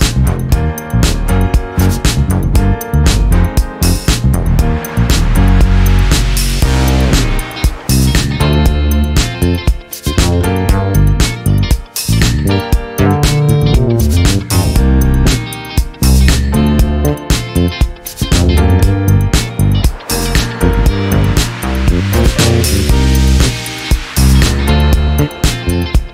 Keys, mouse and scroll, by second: 0.5-3.0 drag, 4.0 click, 7.1 ctrl+click, 10.4 click, 11.3-13.9 ctrl+drag, 14.0-14.8 ctrl+scroll up 6, 15.8-17.2 ctrl+shift+drag, 18.6 ctrl+shift+click.